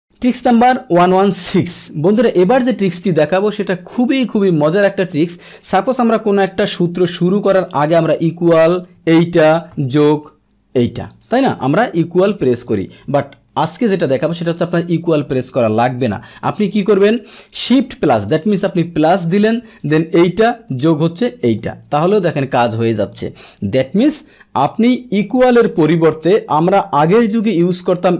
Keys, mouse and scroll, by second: 2.5 click, 8.7 Left, 9.5 shift+Left, 11.1 click, 11.7 Return, 12.6 click, 13.2 Delete, 21.1 click, 21.4 Return, 22.3 click, 23.2 click, 25.4 click, 25.6 click, 26.5 Return, 27.1-27.6 drag, 27.7 Delete.